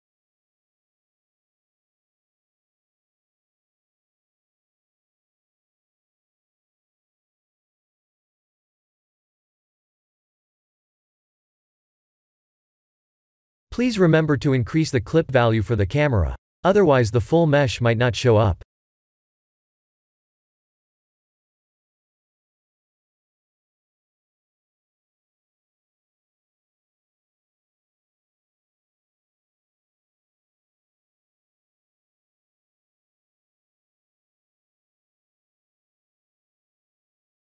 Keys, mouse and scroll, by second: 2.0 click, 3.1 click, 6.8-7.2 scroll up 4, 7.4-7.8 scroll down 3, 8.2-9.9 middle drag, 10.1 scroll up 3, 10.7-11.0 shift+middle drag, 11.2-11.8 middle drag, 12.1 KP_0, 13.5 scroll up 3, 14.4 click, 15.5 s, 21.2 click, 25.3 click, 27.2-29.1 drag, 27.6 1, 27.7 1.